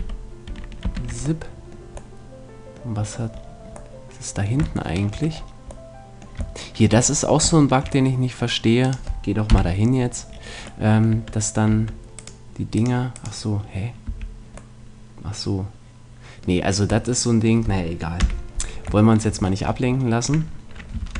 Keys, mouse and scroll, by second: 0.0 ctrl+z, 0.5 ctrl+z, 0.9 ctrl+z, 1.5 middle click, 2.3 middle click, 4.3 middle click, 5.7 middle click, 5.9-8.8 middle drag, 8.8 right click, 9.5 KP_Decimal, 9.6 click, 9.7 right click, 10.3 middle click, 11.1 Tab, 11.7 Tab, 14.1 a, 14.5 middle click, 15.9 middle click, 17.1 middle click, 18.2 KP_3, 21.0 ctrl+Tab.